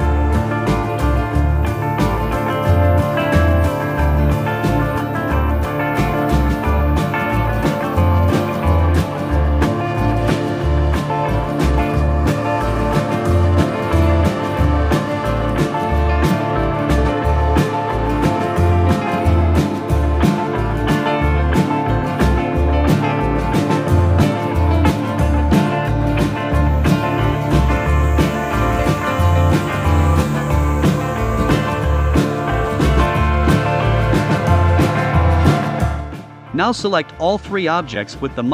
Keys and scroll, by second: 0.4 shift+Down, 12.6 a, 15.8 v, 18.6 super+c, 18.8 super+f, 19.2 shift+Right, 20.6 super+c, 20.8 super+f, 21.2 shift+Right.